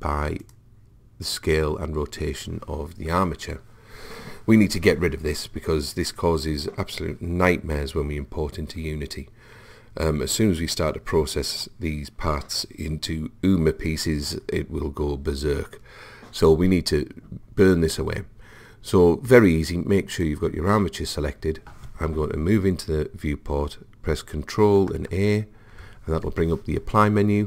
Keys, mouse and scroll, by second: 20.2 click, 25.0 ctrl+a.